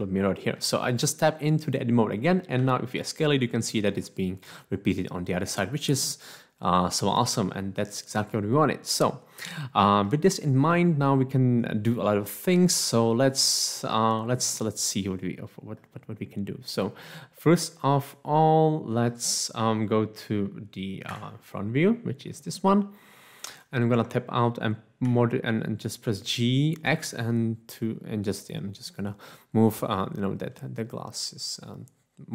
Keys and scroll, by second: 2.6 s, 4.1 s, 21.1 1, 24.0 Tab, 25.0 g, 26.8 x.